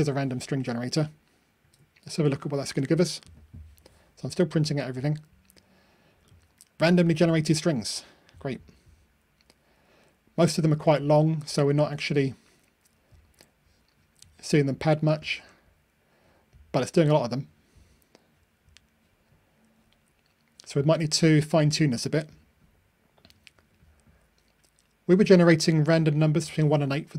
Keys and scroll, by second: 0.0 super+F9.